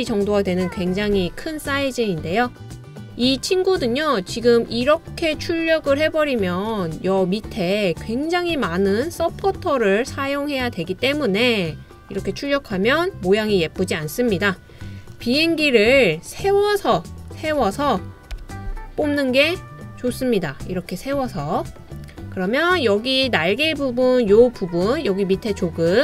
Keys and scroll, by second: 18.4 d.